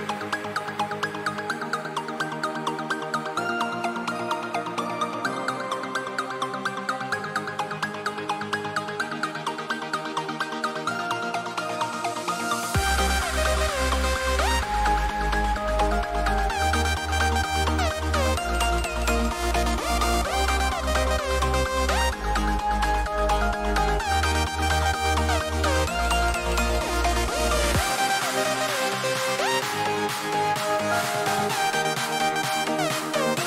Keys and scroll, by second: 15.9 ctrl+shift+n, 16.8 Return, 20.5 shift+F5, 32.2 ctrl+=, 32.4 ctrl+=, 32.7 ctrl+=.